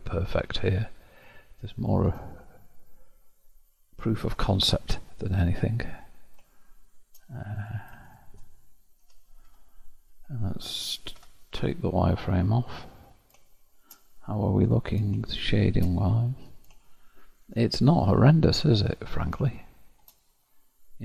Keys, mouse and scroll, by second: 0.0-2.5 shift+middle drag, 2.5-3.5 scroll up 1, 3.5-4.6 scroll up 1, 4.6-5.7 scroll down 1, 5.7-6.6 scroll up 2, 6.6-7.7 shift+middle drag, 7.7 click, 8.1 shift+click, 9.1 o, 9.6 Tab, 11.1 alt+v, 12.8-13.5 scroll down 6, 13.5-14.1 shift+scroll up 1, 14.1-17.8 middle drag, 17.8-18.3 scroll up 3, 18.3-20.1 middle drag, 20.1-20.7 scroll down 2, 20.7-21.0 middle drag.